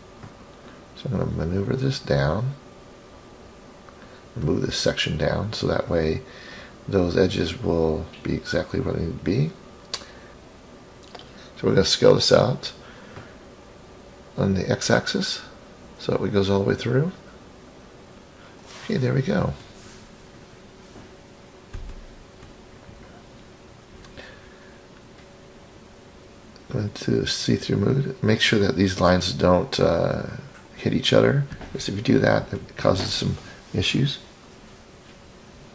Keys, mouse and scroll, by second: 0.7-3.6 drag, 4.2-5.6 middle drag, 10.1 click, 10.3 middle click, 10.3 scroll down 10, 12.2-12.8 drag, 14.1-15.9 drag, 17.1 click, 18.1-19.1 scroll up 4, 20.5 click, 21.1-23.3 middle drag, 24.3 scroll down 3, 24.6-25.8 drag, 26.1-27.1 scroll up 5, 28.0 click, 28.4 click, 29.1-30.3 middle drag, 30.7-32.3 scroll up 12, 33.5-34.3 scroll down 5, 34.3-35.4 middle drag, 34.3 scroll down 1, 35.6-35.7 scroll down 2.